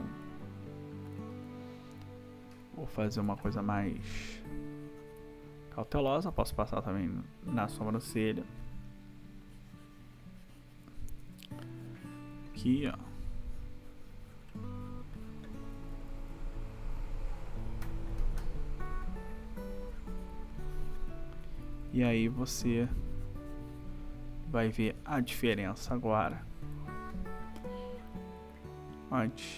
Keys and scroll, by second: 3.1 \, 6.2 ], 11.2 \, 15.7 ], 21.5 \.